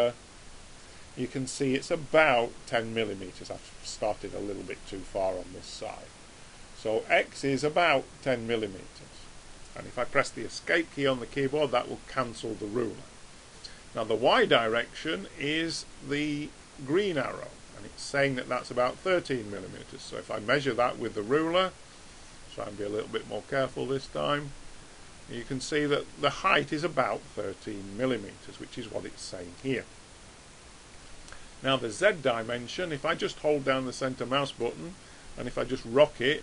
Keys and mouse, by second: 20.4 click, 34.7-36.4 middle drag.